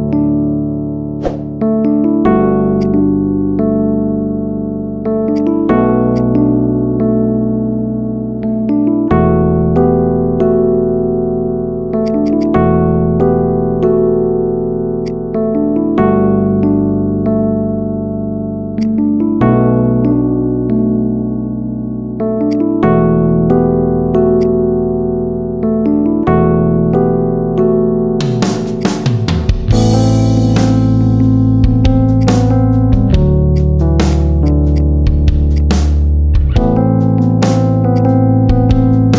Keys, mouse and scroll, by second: 1.2 KP_7, 2.0 Tab, 2.6 click, 3.6 ctrl+r, 7.6-8.0 middle drag, 8.0 scroll up 2, 8.2-12.0 middle drag, 12.0-12.4 shift+drag, 12.8 KP_7, 15.4 KP_3, 16.0-16.3 scroll down 1, 16.3 e, 18.9-19.8 middle drag, 19.8 KP_7, 20.6 e, 22.6 scroll up 1, 22.8 shift+middle click, 23.2 s, 24.4 middle click, 24.8 scroll down 2, 25.0 middle click, 25.5 scroll up 1, 25.6-26.9 middle drag, 26.9 e, 28.8 scroll down 3, 29.0 middle click, 29.2 scroll up 2, 29.4 middle click, 30.0 KP_7, 30.3 middle click, 30.8 scroll up 1, 31.0-32.0 middle drag, 32.0 click, 32.4-33.4 middle drag, 33.4 shift+click, 33.6-34.0 middle drag, 34.0 click, 34.4 shift+drag, 34.6 shift+click, 34.8-35.4 middle drag, 35.4 shift+click, 35.6-37.4 middle drag, 37.4 shift+click, 37.8 shift+drag, 38.0-39.1 middle drag.